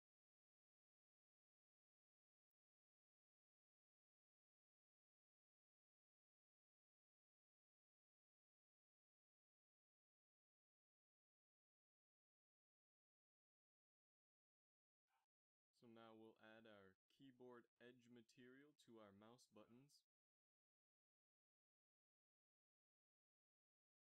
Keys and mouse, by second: 6.5 z, 6.6 z, 7.6 ctrl+s, 8.5 Tab, 10.3 KP_Divide, 11.2 a, 21.3 click, 23.0-24.0 typing.